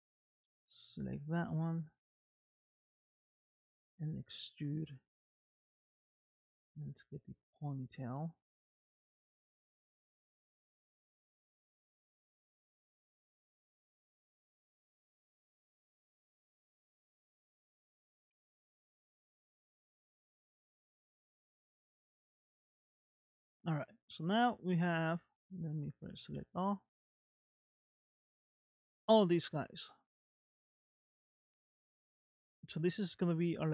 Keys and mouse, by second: 0.9-2.1 middle drag, 2.8 middle click, 3.8 e, 5.3 e, 6.2 e, 7.1 e, 8.2 middle click, 9.3 shift+middle click, 10.7 e, 11.7 e, 12.5 e, 13.6 e, 14.6 e, 15.8 e, 16.9 shift+middle click, 18.2 e, 19.3 e, 20.2 e, 21.1 e, 23.5 shift+middle click, 23.9 shift+middle click, 25.0 middle click, 26.4 a, 26.9-32.1 middle drag, 32.5 shift+middle click.